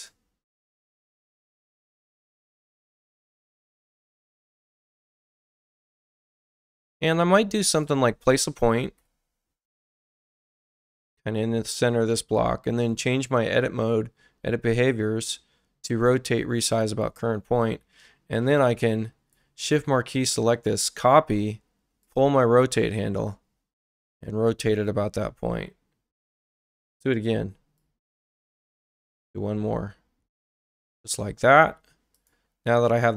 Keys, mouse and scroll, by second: 1.4 click, 2.7 ctrl+click, 3.9 click, 5.1 click, 7.0 ctrl+click, 8.8 p, 9.0 p, 11.0 click, 12.8 click, 16.6 click, 18.1 space, 18.6-19.3 drag, 20.7 ctrl+alt+c, 22.0-24.0 drag, 26.4 ctrl+alt+c, 27.8-30.8 drag, 32.1 click, 32.7 space.